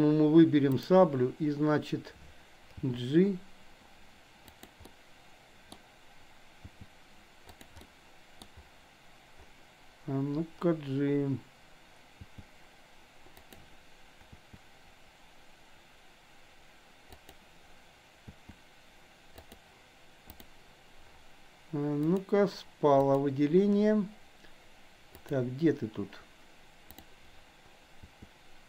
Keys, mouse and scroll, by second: 0.8 click, 2.9 g, 4.9-5.8 middle drag, 6.7 g, 7.8-8.4 middle drag, 12.0 g, 14.4 click, 17.0 click, 18.3 r, 19.3 click, 22.0 click, 23.0 click, 25.2 click, 26.9 click, 27.9 r.